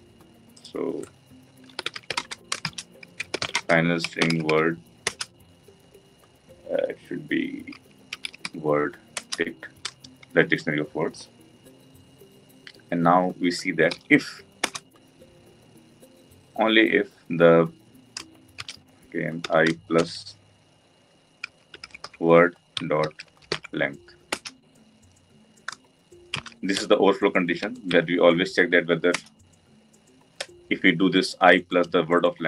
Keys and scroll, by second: 9.1 Return, 14.6 Return, 24.3 Return, 29.1 Return, 30.5 Return.